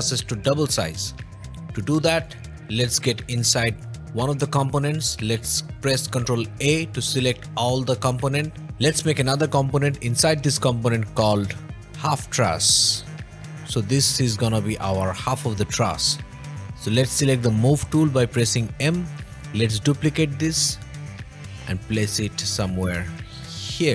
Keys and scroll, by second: 1.4 o, 6.4 ctrl+a, 11.9-13.3 typing, 13.3 Return, 16.5 n, 16.5 m.